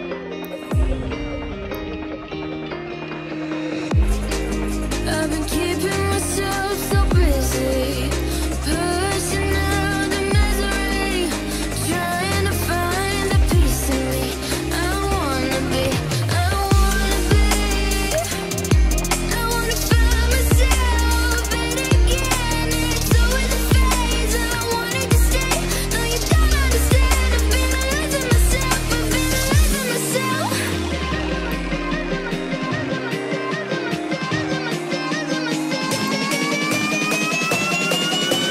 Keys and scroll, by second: 3.0 ctrl+t.